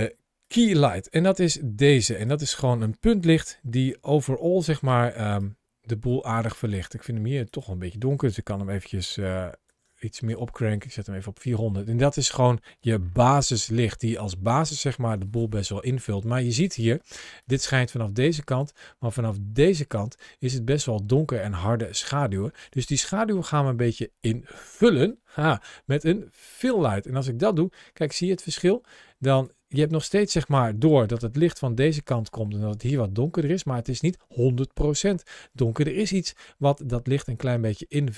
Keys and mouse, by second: 0.2 click, 3.3 g, 5.1 right click, 7.3-10.1 drag, 9.7 KP_0, 11.7 middle click, 13.1 shift+middle click, 14.2 shift+middle click, 16.8 ctrl+shift+a, 26.4 click, 27.9 click, 29.2 click, 29.5 click, 31.0 ctrl+shift+a, 37.3 middle click, 37.9 click.